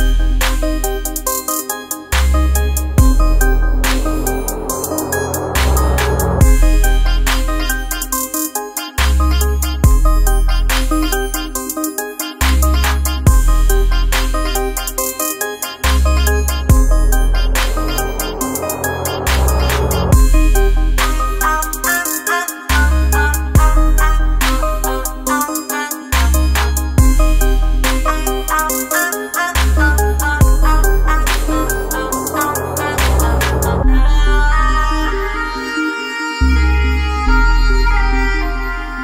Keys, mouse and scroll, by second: 0.1 alt+scroll down 1, 0.4 space, 0.6 click, 1.0-3.9 ctrl+drag, 3.9 space, 4.0 click, 11.4 space, 11.6 click, 12.0 space, 12.7 click, 16.8 space, 20.3 space, 20.6-27.8 ctrl+drag, 28.3 alt+scroll down 1, 29.2 alt+scroll down 1, 29.5 space, 29.6 click, 30.1 space, 30.7 click, 31.1 space, 37.8 space, 37.9 click, 38.3 space, 38.8 space.